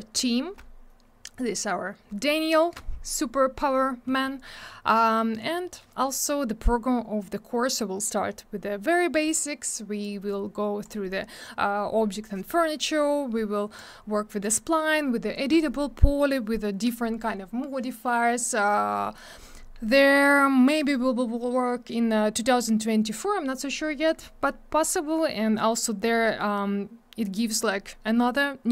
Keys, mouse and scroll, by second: 3.7 scroll down 1, 10.0 click, 13.7 click.